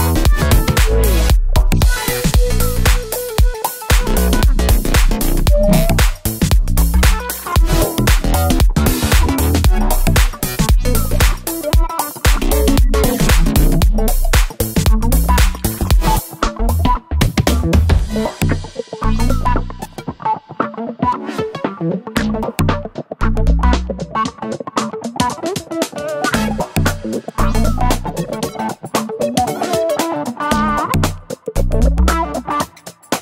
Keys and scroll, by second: 1.4 BackSpace, 3.1 BackSpace, 3.3 BackSpace, 5.6 BackSpace, 6.0-25.6 BackSpace, 29.2 super+c, 29.3 super+v.